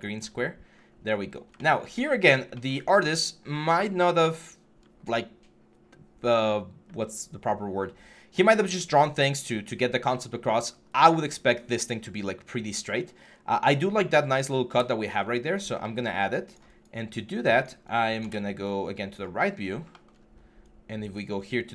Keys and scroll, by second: 0.5 6, 0.9 4, 15.1 6.